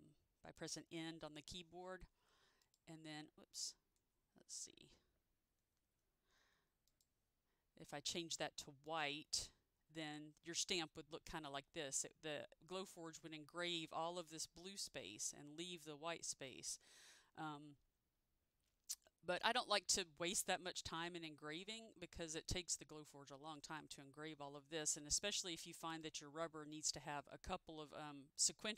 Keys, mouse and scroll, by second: 0.8 End, 2.8 click, 5.8 ctrl+shift+z, 7.0 click, 26.0 click.